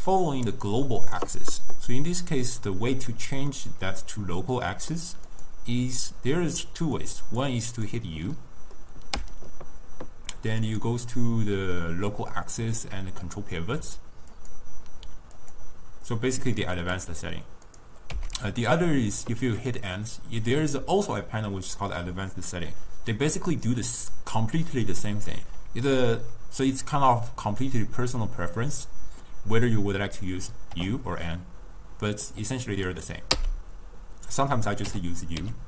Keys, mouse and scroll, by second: 3.5-5.3 middle drag, 5.3 click, 7.0-7.9 drag, 8.4 middle click, 9.2 u, 16.8 u, 18.1 n, 23.4-26.4 drag, 30.8 u, 33.4 n, 34.9 u.